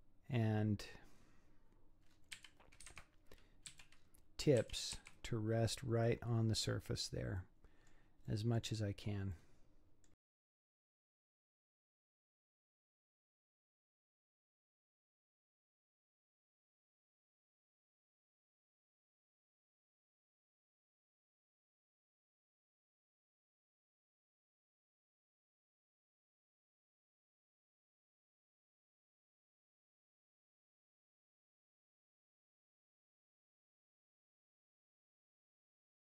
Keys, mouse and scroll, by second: 0.4-1.6 scroll up 12, 2.1 scroll down 5, 2.4 g, 3.7 z, 4.0-4.6 scroll down 5, 4.6 g, 7.0 scroll down 4, 7.4-10.2 middle drag, 10.2 z, 10.3 z, 10.3 scroll up 8, 10.4 middle click, 10.6 shift+click, 11.2 middle click, 11.3-36.0 typing, 12.4 click, 13.2 click, 13.5 click, 13.7 click, 14.3 middle click, 14.6 click, 14.7 middle click, 15.0 middle click, 15.2 click, 15.3 middle click, 15.7 scroll down 4, 15.8 middle click, 16.0 middle click, 16.2 click, 16.2 scroll up 5, 16.3 shift+click, 16.4 shift+click, 16.6 middle click, 17.4 shift+click, 17.9 click, 18.0 middle click, 18.5 shift+click, 18.7 middle click, 18.9 middle click, 19.2 scroll down 3, 19.3 scroll up 1, 19.3 middle click, 19.4 click, 19.5 middle click, 19.7 shift+click, 19.9 middle click, 20.2 middle click, 20.5 click, 20.5 middle click, 21.0 click, 21.5 middle click, 21.7 middle click, 21.8 shift+click, 21.9 middle click, 22.3 middle click, 22.7 click, 23.3 scroll down 1, 23.4 middle click, 23.8 middle click, 24.1 click, 24.2 shift+click, 24.3 middle click, 24.8 click, 25.3 click, 26.2 middle click, 26.4 scroll down 3, 26.5 middle click, 26.7 middle click, 26.8 scroll up 1, 27.0 middle click, 27.2 click, 27.3 middle click, 27.5 middle click, 27.9 middle click, 28.1 click, 28.2 middle click, 28.6 middle click, 28.7 middle click, 29.1 middle click, 29.2 scroll down 5, 29.3 middle click, 29.4 scroll up 7, 29.4 middle click, 29.6 click, 29.8 middle click, 30.1 middle click, 30.3 scroll down 7, 30.4 middle click, 30.6 scroll up 4, 30.6 click, 30.7 middle click, 30.8 middle click, 31.2 middle click, 31.6 shift+click, 31.8 middle click, 32.0 middle click, 32.4 middle click, 32.6 click, 33.0 middle click, 33.5 click, 33.7 middle click, 34.0 scroll down 4, 34.0 middle click, 34.3 scroll up 5, 34.3 middle click, 34.5 click, 35.2 click, 35.4 scroll down 7, 35.5 middle click, 35.7 middle click.